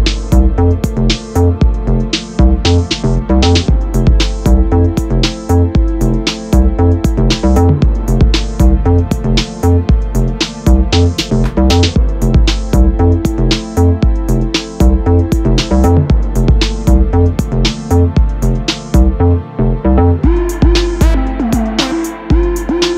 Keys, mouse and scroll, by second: 3.0 Tab, 7.1 click, 8.0-8.4 drag, 8.4-9.4 scroll down 2, 9.4-10.2 scroll down 1, 10.2-10.7 drag, 10.7-11.2 scroll down 4, 12.1-14.7 drag, 15.3-18.6 drag, 18.6-19.8 scroll down 4, 19.8 click, 20.3 space, 20.9 space, 21.1-22.7 middle drag, 22.7 space.